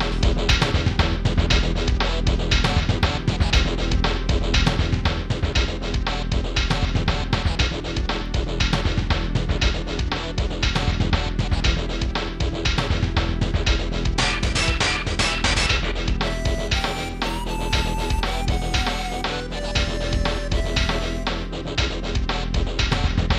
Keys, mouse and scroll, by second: 0.2 ctrl+s, 0.5 click, 7.8-8.3 scroll down 1, 9.4 click, 10.7 click, 11.6 click, 13.8 click, 17.0 scroll up 1, 18.7 scroll up 1, 19.5 right click, 20.0 right click, 22.8 0.